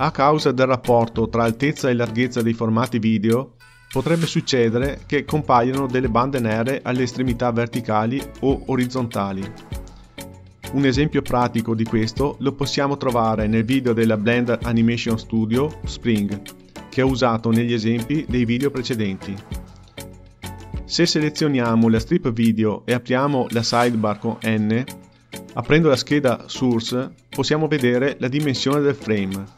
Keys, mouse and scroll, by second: 13.0 click, 13.8 n, 18.8-20.5 drag, 23.4 n, 24.9-25.5 scroll down 2, 26.7-28.8 drag, 28.8-29.5 scroll down 1, 29.5 scroll down 5.